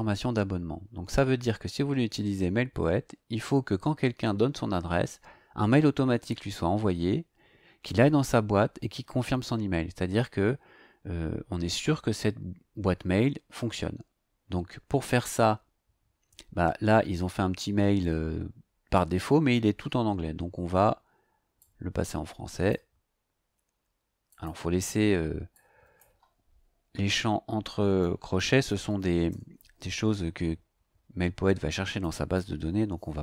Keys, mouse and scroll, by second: 18.3-18.6 scroll down 1, 20.2-20.5 scroll up 1, 21.6-22.9 drag, 24.3 click, 25.5 click, 27.6-29.5 typing, 30.4 Left, 32.0 BackSpace, 32.3 o.